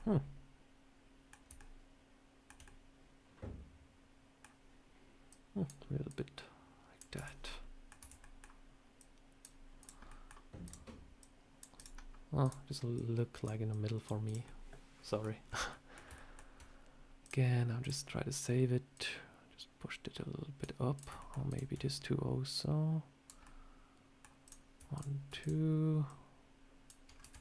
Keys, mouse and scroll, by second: 1.4 shift+middle click, 2.5 middle click, 5.2 click, 5.9 click, 7.0 Tab, 7.3 middle click, 7.8 Tab, 8.1 middle click, 8.8 click, 9.7 click, 9.9 middle click, 10.5 click, 11.1 click, 11.6 click, 12.3 click, 12.8 click, 13.6 click, 14.1 click, 14.3 middle click, 15.3 scroll up 3, 15.6 middle click, 15.9 scroll down 1, 16.0 shift+middle click, 17.1 click, 18.2 click, 18.8 click, 20.8 click, 21.0 shift+middle click, 21.3 shift+click, 21.4 shift+click, 22.3 click, 23.3 middle click, 24.3 click, 24.8 shift+click, 25.3 click, 25.9 click, 26.0 shift+click, 27.0 scroll down 3, 27.1 Tab.